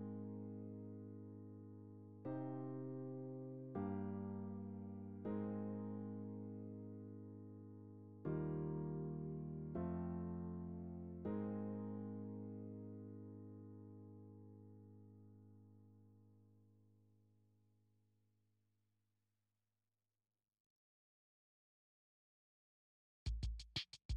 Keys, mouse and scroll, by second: 0.4 ctrl+click, 0.9 middle click, 1.8 click, 2.2 middle click, 3.2-4.4 drag, 4.4-5.6 middle drag, 5.6-7.8 ctrl+drag, 7.8-9.5 middle drag, 9.5 ctrl+r, 9.9 middle click, 10.7 click, 11.1-12.5 middle drag, 12.5 click, 13.3 f, 14.0-15.4 drag, 15.4 middle click, 16.1 click, 16.4-17.4 middle drag, 17.4-18.6 drag, 18.6 middle click, 19.1 click, 19.6 middle click, 20.1 click, 20.8 middle click, 21.2 click, 21.8-22.8 middle drag, 22.8 f, 23.7-24.1 ctrl+drag.